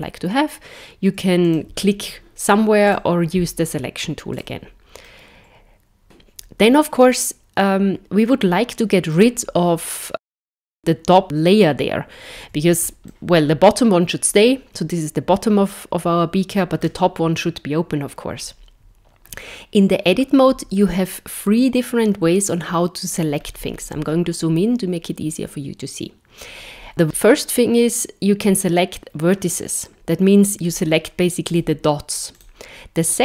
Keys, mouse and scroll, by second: 1.4 click, 2.9 click, 4.3 click, 5.1 middle click, 13.1 middle click, 23.4-26.9 scroll up 6, 27.0 click, 30.6 click, 31.5 click, 32.4 click.